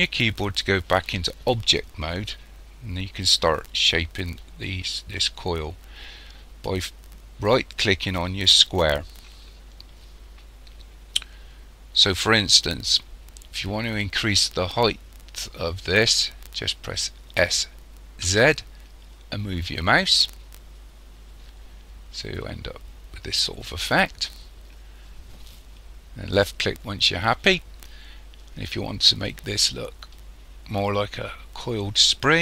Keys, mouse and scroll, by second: 8.7 right click, 17.4 s, 29.1 middle click.